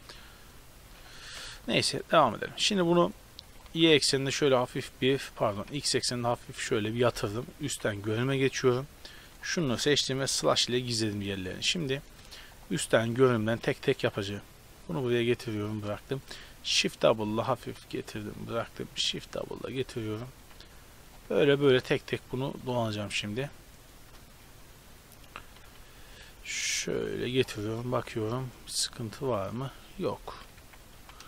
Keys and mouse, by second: 0.9 ctrl+z, 1.4 Tab, 2.0 right click, 2.4-3.0 middle drag, 3.5 r, 5.4 r, 7.7 KP_7, 8.4 z, 10.3 KP_Divide, 14.2 g, 16.4 shift+d, 17.0 r, 17.6 g, 18.8 shift+d, 19.3 r, 20.4 g, 21.6 shift+d, 22.1 r, 22.6 g, 24.0 shift+d, 24.4 r, 25.6 g, 26.2 r, 27.0 g, 27.9 z, 30.6 KP_7, 31.0 z.